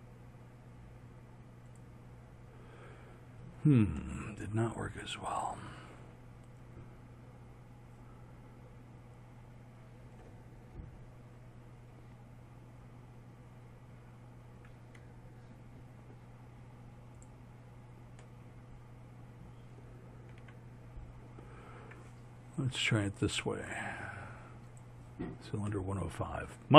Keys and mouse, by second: 4.0-12.9 middle drag, 17.2 click, 18.3-19.0 middle drag, 20.5 z.